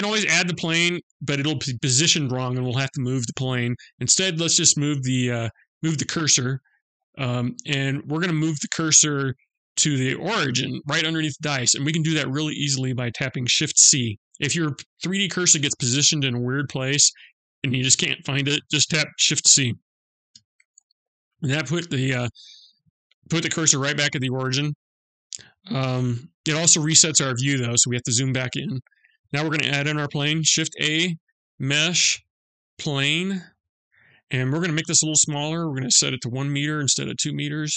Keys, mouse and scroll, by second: 5.5 click, 6.7-8.2 scroll up 2, 8.2 click, 19.7 shift+c, 21.3-22.1 scroll up 2, 22.1-23.2 scroll up 7, 23.2 shift+middle click, 24.0-25.3 scroll up 4, 25.3 KP_Decimal, 25.8-26.9 scroll down 7, 27.0-28.5 scroll down 9, 28.2 middle click, 30.0 shift+a, 33.3-34.0 scroll down 1, 35.2 click.